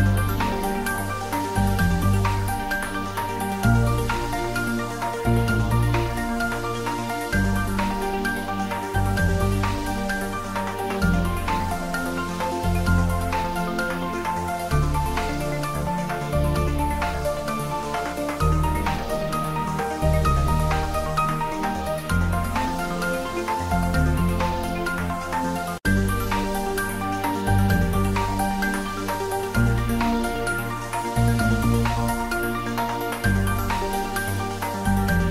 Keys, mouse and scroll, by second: 2.3 click, 2.7 Tab, 3.1 ctrl+middle click, 3.5 shift+middle click, 4.6-7.3 middle drag, 7.3 click, 7.8 shift+right click, 8.0 shift+a, 9.0 click, 9.5 ctrl+middle click, 9.9 s, 10.6 click, 10.9 g, 11.2 click, 11.5 s, 12.0 click, 12.2 ctrl+middle click, 13.4 g, 14.4 click, 14.6 s, 18.0 click, 18.3 g, 19.7 click, 20.3-21.3 typing, 23.6 click, 24.8-25.6 typing, 25.7 Up, 27.2 click, 27.9-28.8 typing, 29.7 click, 30.9 g, 31.2 y, 31.8 Down, 33.4 click, 34.8 middle click.